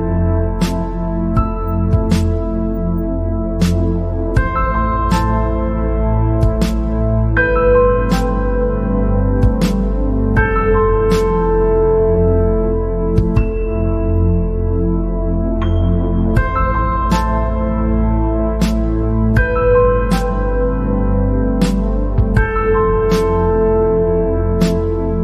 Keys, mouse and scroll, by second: 0.5 click, 2.1-2.6 scroll down 3, 2.6-3.0 scroll down 1, 4.0 click, 5.7 x, 7.0-7.8 scroll down 3, 7.8 scroll up 1, 8.9 KP_0, 9.8 scroll down 2, 10.3 click, 11.3-11.9 scroll up 1, 12.1 g, 14.9 click, 15.2-15.5 scroll down 5, 15.6 scroll up 4, 17.1 scroll up 1, 18.1 KP_0, 19.1 KP_0, 20.2 scroll up 3, 20.7 scroll down 1, 21.0-22.6 middle drag, 22.6 scroll down 1, 22.7 middle click, 23.3 scroll down 1, 23.5 scroll up 2.